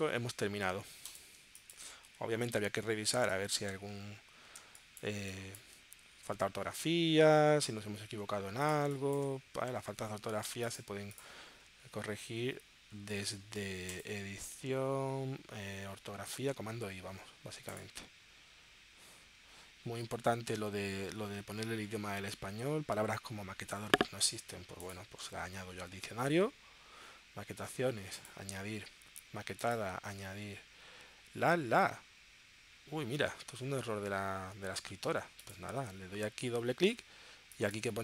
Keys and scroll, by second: 1.4 space, 2.1 w, 3.1 space, 4.6 space, 8.8 space, 9.6 w.